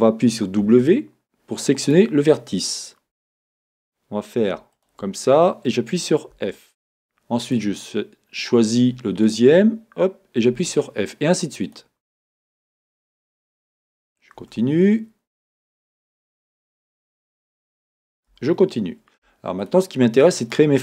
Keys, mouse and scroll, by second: 0.6 w, 4.7 shift+click, 6.3 f, 7.4 click, 9.2 shift+click, 11.7 click, 12.7 shift+click, 15.4 click, 17.0 shift+click, 18.3 f, 19.6 shift+click, 20.4 shift+click.